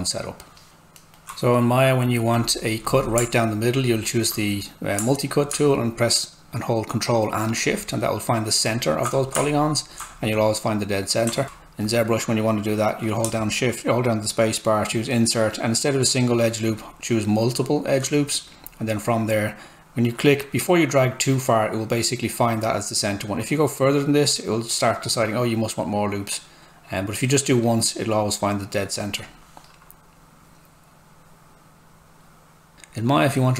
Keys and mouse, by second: 0.7 alt+middle click, 2.3 click, 7.6 ctrl+shift+click, 11.4 alt+Tab, 13.2 space, 16.7 click, 16.8 space, 18.9 click.